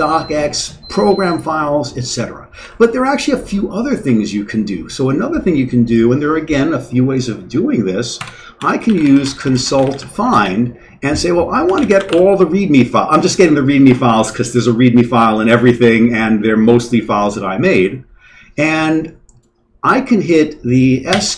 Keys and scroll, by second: 2.6 q, 3.1 Down, 3.6 Down, 8.2 Escape, 8.3-12.6 typing, 21.1 s.